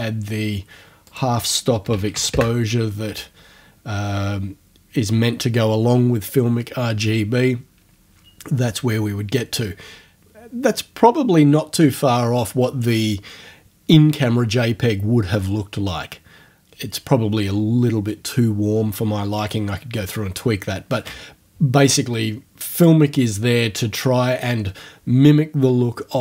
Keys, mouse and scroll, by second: 1.1 right click, 1.6-2.7 typing, 22.8 click, 23.7-24.2 scroll up 2.